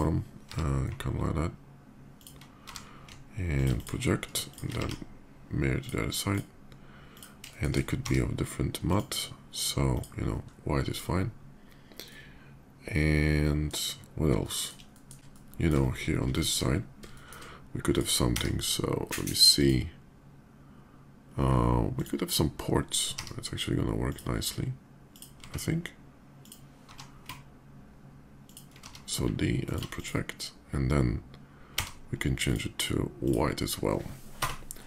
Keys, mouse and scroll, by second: 1.9 ctrl+g, 1.9 click, 2.4 d, 2.9 alt+d, 3.3 click, 3.5 click, 4.3 shift+click, 4.5 alt+x, 5.6 click, 6.0 click, 6.8 click, 7.3 shift+middle drag, 7.9 d, 8.6 click, 9.6 click, 10.7 click, 11.8-13.4 middle drag, 14.2 middle drag, 14.7 shift+middle click, 15.1 shift+middle click, 15.4 shift+middle click, 16.1 shift+middle click, 16.9 shift+middle click, 17.6 click, 18.0 d, 19.3 click, 21.7 click, 23.0 d, 23.8 click, 24.1 middle click, 24.5 middle click, 24.8 click, 25.2 s, 26.2 click, 26.6 g, 27.9 ctrl+g, 28.2 ctrl+click, 28.6 d, 29.3 d, 29.4 click, 29.7 click, 31.4 d, 32.2 click, 33.0 click, 34.2 KP_0.